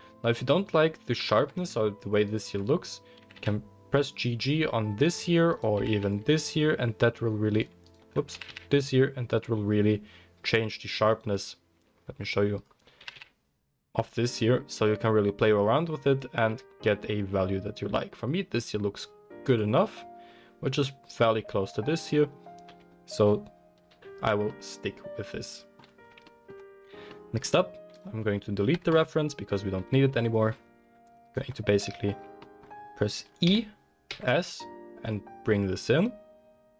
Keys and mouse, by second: 1.5-2.1 middle drag, 1.6 Tab, 2.6-5.5 middle drag, 3.1 g, 5.5 click, 5.7-7.7 middle drag, 7.7 alt+g, 8.2-12.5 middle drag, 8.3 g, 12.5 click, 12.7-15.6 middle drag, 12.9 g, 19.5 click, 20.9-24.1 middle drag, 22.6 Tab, 24.6-25.2 middle drag, 27.9 click, 28.7 x, 29.4 click, 29.7 Tab, 29.7-31.2 middle drag, 31.2 alt+click, 31.5-33.4 middle drag, 33.4 e.